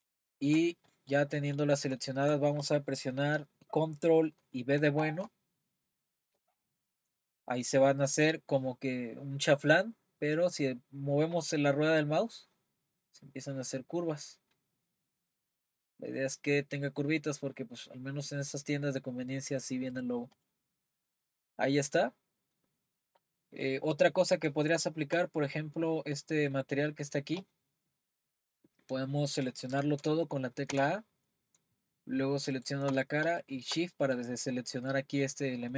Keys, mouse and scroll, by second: 0.5 shift+click, 0.9-3.0 middle drag, 3.0-4.4 scroll down 1, 4.4-5.0 scroll down 1, 5.0 b, 20.5 click, 20.9-23.9 middle drag, 26.5-30.7 drag, 30.7 a, 32.6 click, 33.9-35.7 middle drag.